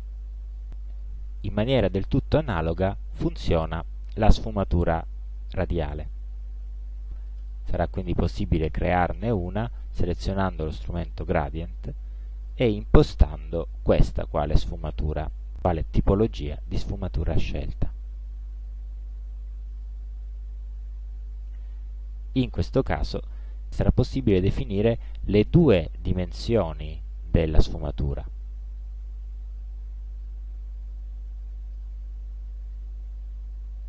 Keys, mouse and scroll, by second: 0.1 ctrl+scroll down 2, 0.9 ctrl+scroll up 1, 2.5-3.6 drag, 4.3 click, 5.1-6.4 drag, 12.5 click, 17.7-23.3 drag, 24.4-26.2 drag, 27.6-32.0 drag, 32.9-33.8 drag.